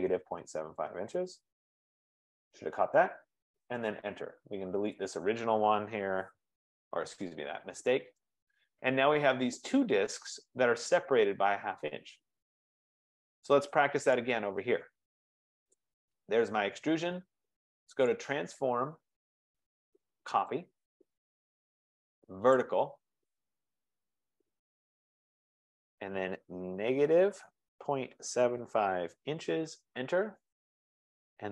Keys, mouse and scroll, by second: 0.2 click, 0.4-1.7 typing, 1.7 click, 1.8 Return, 3.3 Return, 5.3 click, 5.9-7.0 typing, 7.8 scroll, 8.1 middle click, 10.4 right click, 10.4 scroll, 12.3-12.8 scroll, 13.3-13.7 scroll, 14.4 click, 15.9 click, 18.1 click, 20.7 click, 22.7 click, 25.2 F15, 25.2 double click, 27.3-29.8 typing, 30.0 Return.